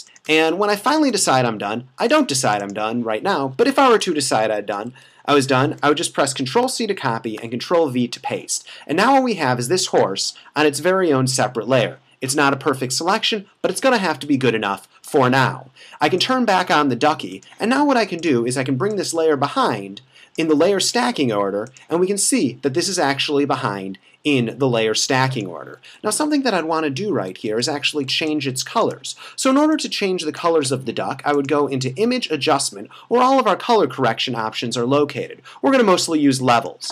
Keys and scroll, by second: 0.5 space, 4.2 super+-, 4.7 super+-, 5.4 super+-, 6.6 super+c, 7.4 super+v, 26.1 f, 26.7 super+=, 27.5 super+-, 28.2 space.